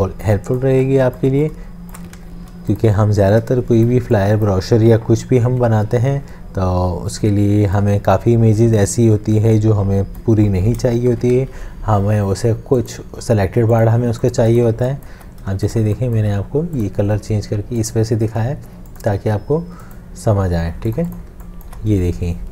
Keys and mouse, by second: 0.0 space, 0.3 shift+click, 0.7 shift+space, 1.2 space, 1.8 shift+click, 2.4 ctrl+z, 3.5 shift+click, 3.9 ctrl+z, 3.9 shift+space, 4.4 click, 10.5 v, 11.1 ctrl+shift+[, 11.3 v, 14.7 space, 21.3 space.